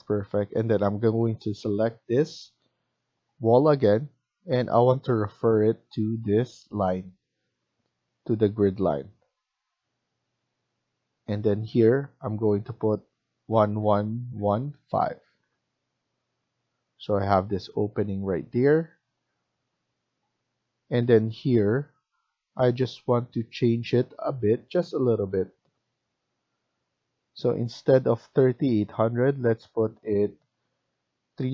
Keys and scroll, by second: 13.4 1, 13.7 1, 14.2 1, 14.7 5, 15.4 Return, 17.9 Escape, 18.2 Escape, 31.4-31.5 typing.